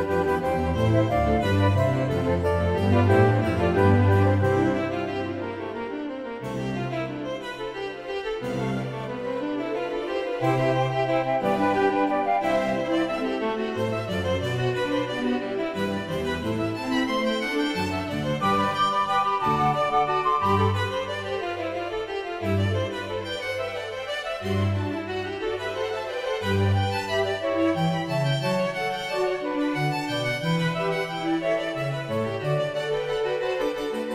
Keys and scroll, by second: 1.7 ctrl+t, 23.0 Return, 24.1 Return.